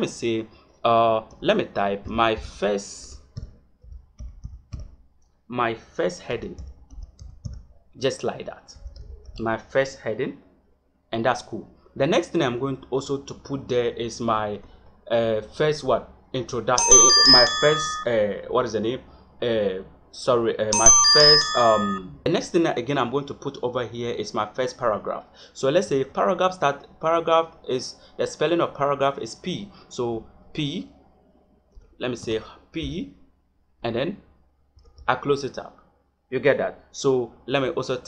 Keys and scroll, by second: 1.2 Caps_Lock, 1.9 m, 4.2 r, 4.4 s, 4.7 t, 6.2 space, 6.8 e, 9.2 g, 14.5 Return, 25.8 shift+,, 30.0 p, 31.6 BackSpace, 32.7 p, 34.7 shift+..